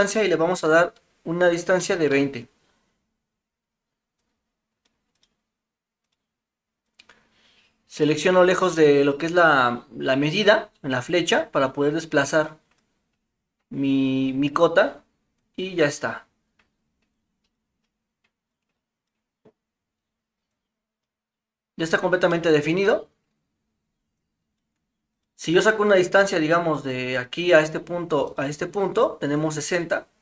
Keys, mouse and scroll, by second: 4.3-6.1 drag, 7.0-8.0 drag, 11.3-12.8 drag, 15.4-15.9 drag, 17.2-17.6 drag, 18.6-19.1 drag, 20.6-21.0 drag, 22.3-23.6 middle drag, 24.2-24.6 drag, 25.1 click, 25.9 click.